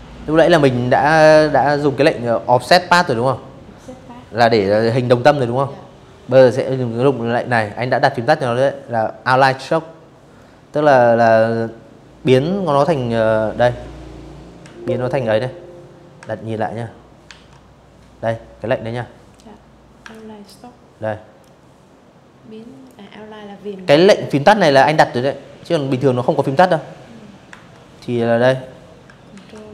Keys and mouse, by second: 12.3 ctrl+w, 14.9 ctrl+1, 17.8 ctrl+click, 19.1-20.5 ctrl+drag, 25.2 Escape, 27.0 ctrl+w.